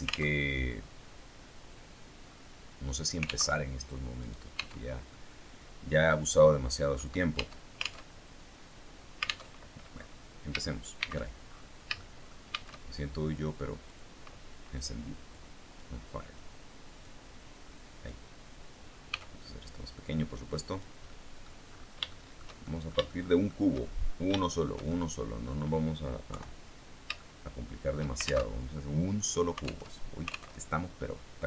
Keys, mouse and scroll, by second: 0.2 alt+Tab, 1.4 scroll up 2, 1.5-2.2 scroll down 2, 2.2 scroll up 2, 3.4 alt+Tab, 4.1 right click, 4.4 Tab, 5.0-6.9 middle drag, 6.9 click, 7.2 Tab, 9.4 alt+Tab, 10.0-10.6 scroll down 3, 10.8 shift+c, 11.8 shift+middle click, 12.4 shift+a, 13.9 click, 15.2-16.4 drag, 16.9-18.2 drag, 19.0 s, 20.6 click, 21.0 middle click, 22.0-23.6 shift+middle drag, 24.0 shift+scroll up 1, 24.2-26.0 shift+middle drag, 26.2 KP_3, 27.1 shift+middle click, 28.4 alt+shift+Tab, 29.8 alt+Tab.